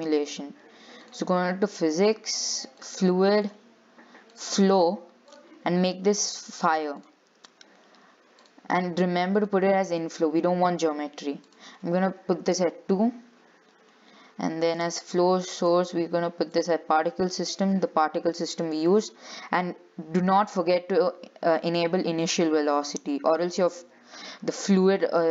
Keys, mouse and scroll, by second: 1.3 click, 3.1-7.7 drag, 7.7-8.3 scroll down 1, 8.3-8.6 scroll down 1, 8.6-13.5 drag, 13.5-14.9 scroll down 10, 14.9-19.9 drag.